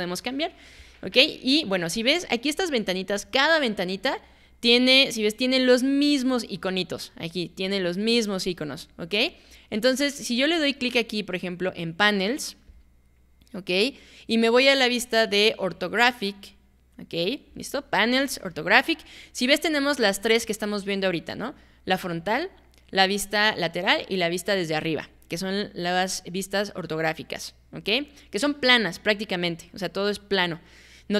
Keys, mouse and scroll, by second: 12.7 click.